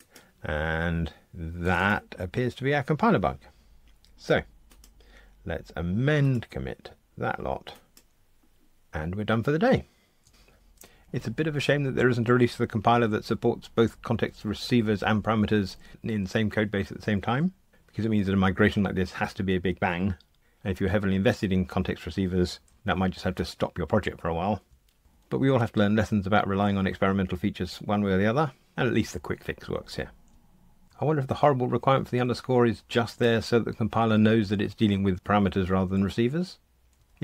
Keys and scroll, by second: 6.3 ctrl+alt+m.